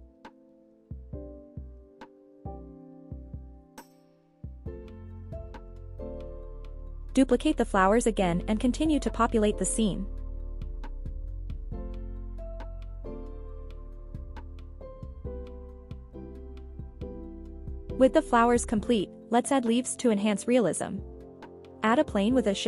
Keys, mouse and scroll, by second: 0.7-1.1 scroll down 2, 1.4 shift+middle drag, 1.9 shift+d, 2.2 right click, 2.7 g, 2.9 z, 4.0 click, 4.4 r, 4.7 z, 6.7 click, 7.2 r, 7.3 r, 7.8 right click, 8.1 r, 9.0 click, 9.4-10.0 scroll down 2, 10.3 shift+middle drag, 10.7 shift+d, 11.0 right click, 11.5 scroll up 2, 11.8 g, 12.0 z, 13.8 click, 14.1-14.5 scroll down 1, 14.6 shift+middle drag, 15.4 shift+d, 15.8 right click, 16.4 g, 16.6 z, 18.1 click, 18.4-19.3 scroll down 3, 19.3-19.7 scroll up 3, 20.0-20.4 scroll up 2, 20.4 click, 20.7 scroll down 1.